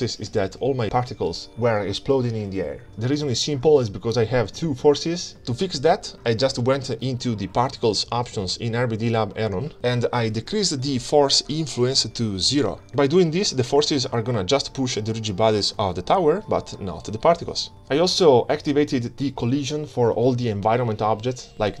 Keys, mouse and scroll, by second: 2.1 space, 2.7-3.7 scroll down 2, 4.4 click, 4.7 middle click, 4.9 ctrl+space, 5.3 middle click, 6.0 click, 7.8-8.3 scroll down 4, 9.0-11.4 drag, 12.3 scroll down 3, 13.2 click, 13.2-13.9 scroll down 1, 15.6 click, 16.4 scroll down 2, 16.7 middle click, 16.9 middle click, 16.9 scroll up 3, 17.1 shift+click, 18.0 ctrl+shift+middle click, 18.1 scroll down 1, 18.2 scroll up 1, 18.3 shift+click, 18.4 shift+click, 18.5 scroll down 7, 18.6 scroll up 1, 18.7 shift+click, 19.1 click, 20.4 ctrl+c, 21.5 click.